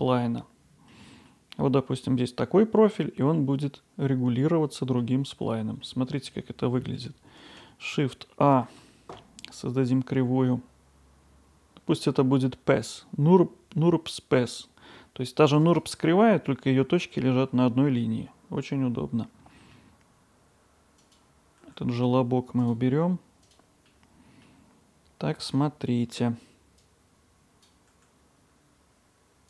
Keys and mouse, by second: 0.5-0.9 middle drag, 5.3-5.8 middle drag, 6.5-7.0 middle drag, 8.5 shift+a, 18.9-19.8 middle drag, 21.0 click, 21.6 g, 23.4-23.9 drag, 23.9-24.5 middle drag, 25.4 Tab, 26.9-27.9 drag, 27.9 g.